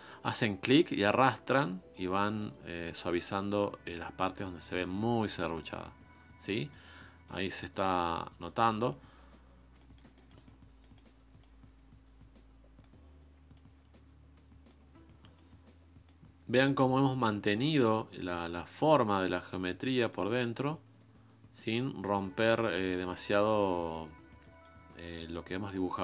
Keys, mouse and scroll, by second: 0.6-1.7 drag, 4.1 click, 6.4 click, 8.3 click, 9.1-9.7 scroll down 3, 9.7 middle click, 10.4-10.8 scroll up 4, 10.8-12.4 middle drag, 12.4 click, 13.5 click, 16.4 click, 16.9-17.2 scroll down 4, 17.5 middle click, 18.0-18.6 scroll up 3, 18.6-20.4 middle drag, 20.4-21.1 scroll up 2, 21.1-21.8 scroll down 6, 21.8-23.3 middle drag, 23.3-23.6 scroll up 1, 23.6-26.0 middle drag.